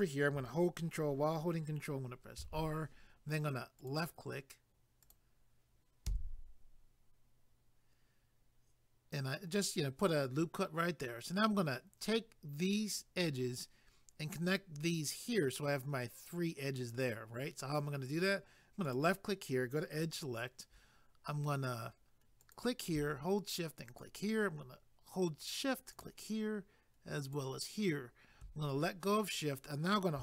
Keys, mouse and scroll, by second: 2.4 ctrl+r, 3.8 click, 5.0 click, 6.1 a, 18.9 click, 22.4 click, 23.9 shift+click, 25.9 shift+click.